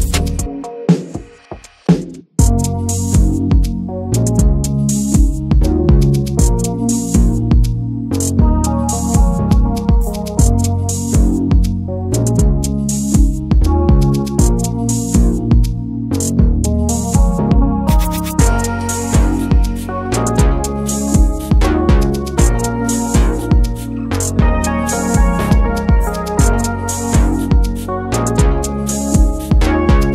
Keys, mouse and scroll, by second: 0.2-1.4 drag, 1.4 scroll down 2, 1.6-2.2 middle drag, 2.2 /, 2.4-3.3 middle drag, 3.3 Tab, 3.5 click, 3.7 Tab, 3.9 click, 4.1 Tab, 4.3 a, 4.7 shift+n, 5.4 Tab, 5.5 click, 5.7 middle click, 6.3 click, 6.7 ctrl+a, 7.6 click, 7.8 middle drag, 8.9 ctrl+1, 9.1 ctrl+2, 9.3 click, 9.5-11.9 middle drag, 11.9 ctrl+s, 12.1-13.5 shift+middle drag, 13.9 click, 14.3 ctrl+a, 14.8-15.2 middle drag, 15.2 ctrl+s.